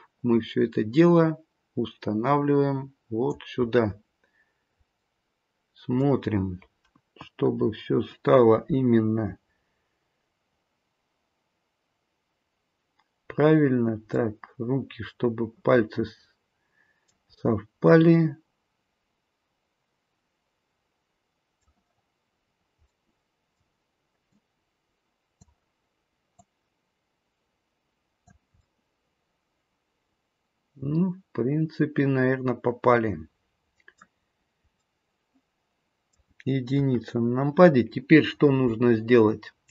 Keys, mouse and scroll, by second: 3.6-5.0 scroll up 1, 5.0 middle click, 5.0-5.5 scroll up 5, 7.5-9.3 scroll down 2, 7.5 KP_1, 9.9-12.3 scroll down 1, 14.1 middle click, 17.4-17.9 scroll up 2, 17.9 middle click, 22.4-22.8 scroll down 1, 22.8 middle click, 24.3 click, 26.3 click, 28.5 middle click, 34.2-36.7 scroll down 3, 34.7 middle click, 36.7 KP_1, 37.3-37.7 scroll down 1, 37.7-39.7 scroll up 2.